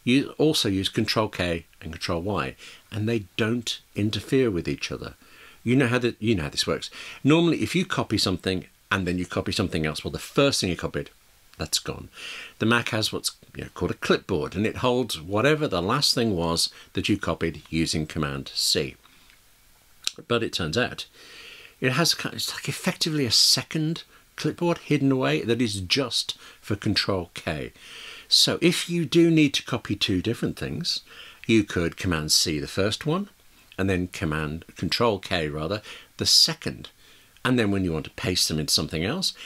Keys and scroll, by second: 3.6 ctrl+k, 31.9 super+c, 36.7 ctrl+k.